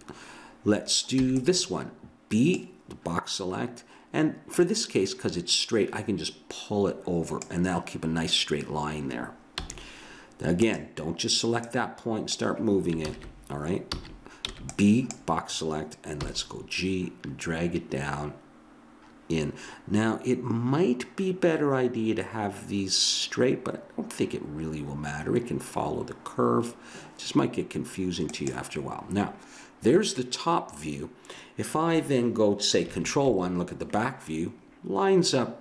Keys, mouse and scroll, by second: 1.2 b, 4.5-6.6 drag, 9.6 a, 10.6-11.6 right drag, 11.6 click, 13.0 ctrl+z, 13.9 a, 14.5 b, 16.2 g, 33.0 ctrl+KP_1.